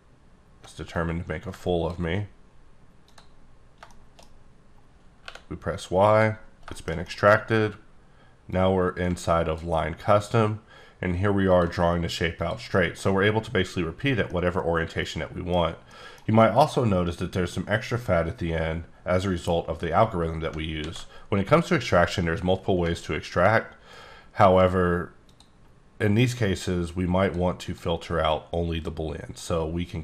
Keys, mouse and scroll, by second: 0.3-0.7 alt+scroll up 2, 0.9 click, 3.9 shift+middle click, 5.2 y, 6.1 click, 6.4 scroll down 1, 6.7 shift+middle click, 7.4-8.5 scroll up 1, 8.5 click, 12.7 middle click, 14.2 middle click, 14.5 scroll down 1, 15.9 middle click, 20.8 ctrl+z, 23.0-23.6 alt+scroll down 1, 23.6-23.9 scroll down 1, 23.9-24.3 alt+scroll up 1, 24.3 alt+scroll down 1, 25.3 click, 27.2 click, 29.5 click.